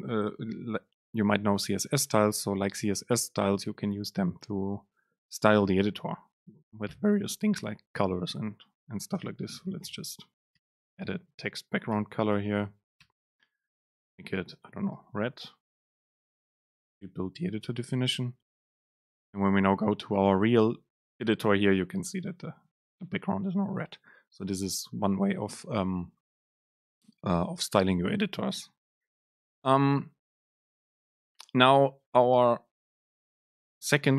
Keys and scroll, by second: 9.3 super+space, 14.1 Right, 14.7 super+space, 17.0 ctrl+shift+super+F9.